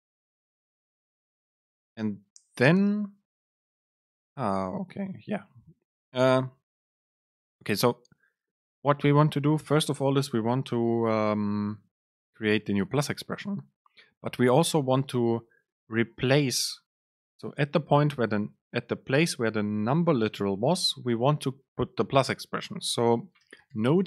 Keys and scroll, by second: 3.5 Up, 5.4 End, 6.3 Return.